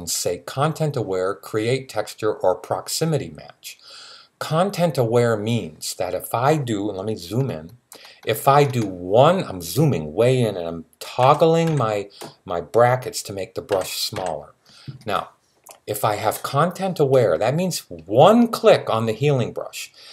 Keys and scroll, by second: 11.0 [, 11.5 [, 13.5 [, 13.9 [.